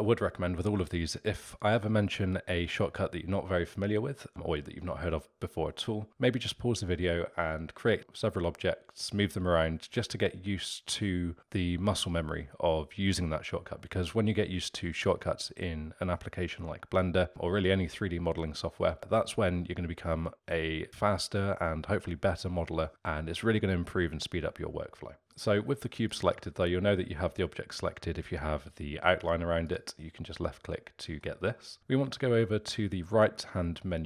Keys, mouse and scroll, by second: 25.3 click, 25.9 click, 29.2 click, 29.6 click, 30.4-33.7 middle drag.